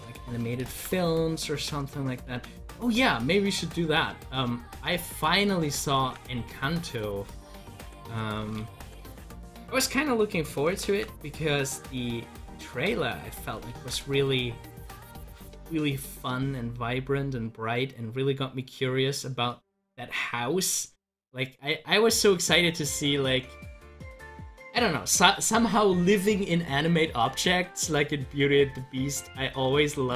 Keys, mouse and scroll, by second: 0.7 ctrl+z, 5.9 ctrl+z, 8.6 ctrl+z, 11.0 ctrl+z, 13.7 ctrl+z, 28.3-29.9 drag, 29.9 ctrl+z.